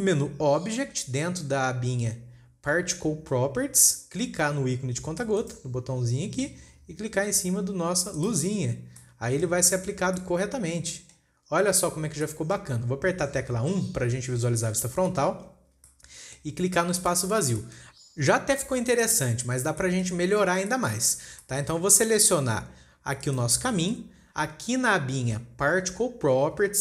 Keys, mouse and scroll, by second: 5.8 click, 9.3 scroll down 1, 9.4-11.9 middle drag, 11.9-12.2 scroll up 2, 12.4 scroll down 2, 12.7 middle click, 13.0 scroll up 1, 15.1 KP_1, 16.4-17.4 shift+middle drag, 17.4 click, 18.0-18.4 shift+middle drag, 18.4-18.8 scroll up 16, 18.8-19.2 scroll down 10, 19.4-19.9 shift+middle drag, 19.9-20.3 scroll up 5, 20.3-20.8 shift+middle drag, 20.8-21.9 scroll up 7, 21.2 shift+middle click, 21.9 shift+middle click, 22.2 scroll up 4, 22.8 click.